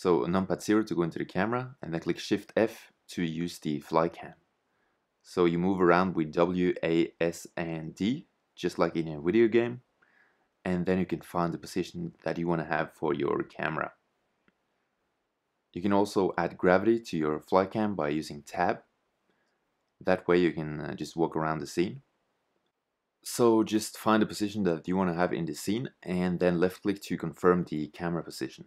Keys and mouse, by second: 1.2 shift+f, 8.9 shift+z, 16.0 shift+f, 23.4 shift+z, 23.5 shift+f, 25.5 shift+z, 25.9 shift+z, 26.4 shift+f.